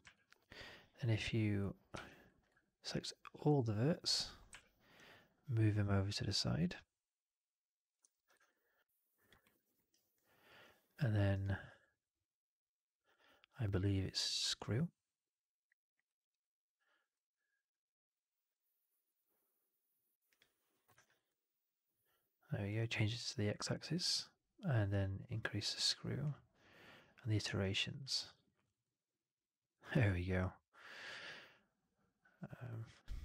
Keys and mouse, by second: 1.8 3, 3.3 ctrl+a, 4.4 w, 6.3-7.8 drag, 7.9 4, 8.4-9.2 alt+drag, 9.3 alt+middle drag, 9.5 alt+right click, 9.6 alt+right click, 10.0 alt+click, 17.4-20.8 drag, 20.9 alt+right drag, 21.1-22.6 alt+drag, 23.6 alt+middle drag, 27.5 alt+click, 28.0 alt+middle drag, 28.2 alt+right drag, 28.4 alt+right drag, 28.7-29.6 alt+drag, 32.8 click.